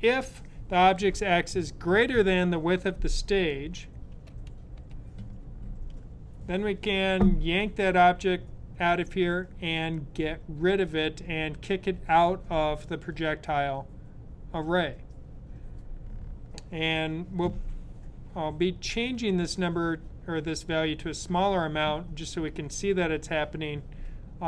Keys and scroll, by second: 4.1 shift+[.